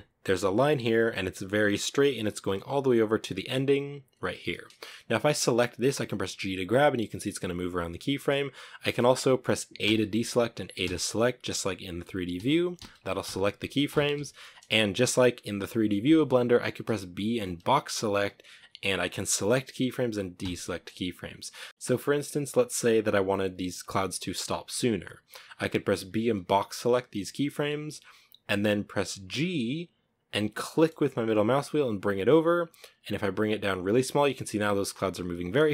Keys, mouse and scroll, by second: 4.3 right click, 5.1 g, 8.2-8.6 middle drag, 8.6 scroll down 2, 9.1 a, 10.0 a, 11.6-13.3 typing, 16.2 b, 17.9 b, 19.6 a, 24.9 b, 28.5 g, 33.1-34.9 drag, 34.9 middle click, 35.1 scroll up 5, 35.5-35.7 middle drag.